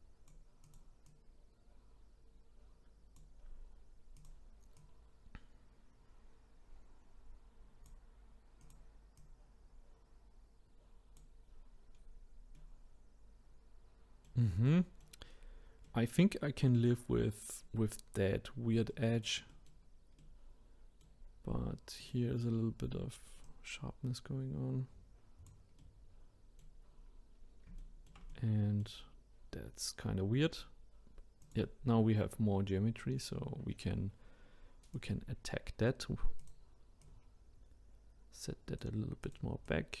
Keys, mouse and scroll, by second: 1.0 click, 4.2 click, 8.6 click, 9.2-12.0 drag, 12.0-12.5 scroll down 2, 12.5-15.4 middle drag, 15.4-15.9 scroll up 2, 15.9-18.9 middle drag, 19.5-22.0 middle drag, 22.0-24.0 drag, 25.8-26.9 middle drag, 26.9-27.3 scroll up 1, 27.3-27.8 scroll down 1, 27.8-31.3 shift+middle drag, 31.4 click, 34.9-36.5 drag, 37.0 click, 39.2 click, 39.6-40.0 drag.